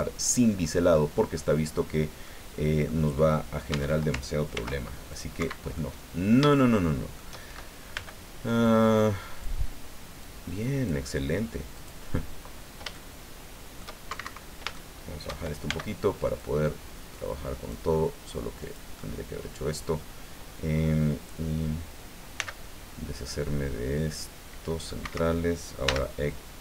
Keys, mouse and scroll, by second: 1.3 click, 2.2 click, 3.2 click, 3.7 Tab, 4.5 ctrl+r, 5.1 ctrl+click, 5.3 Escape, 5.7-7.3 middle drag, 7.9 b, 8.6 click, 10.2 click, 11.8 click, 12.9-14.0 shift+drag, 14.1 shift+Escape, 14.7 shift+middle click, 15.7 shift+b, 16.4-17.9 drag, 18.6 click, 22.3 c, 23.2-25.0 drag, 25.0 Escape, 25.8 x.